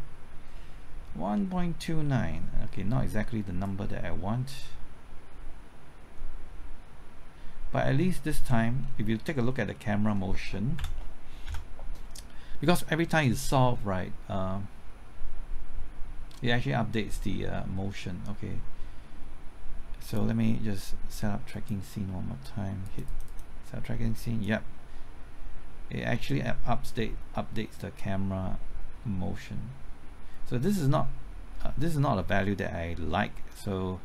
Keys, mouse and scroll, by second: 8.8-9.2 scroll down 1, 9.4-10.6 middle drag, 10.7 Down, 11.4 KP_0, 13.2-34.0 drag.